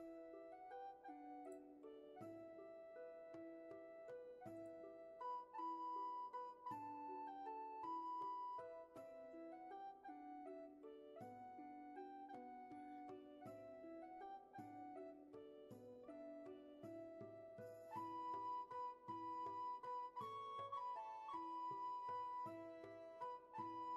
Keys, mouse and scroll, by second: 10.5 ctrl+z, 11.5 space, 18.5 ctrl+z, 20.9 ctrl+z, 23.6 ctrl+z.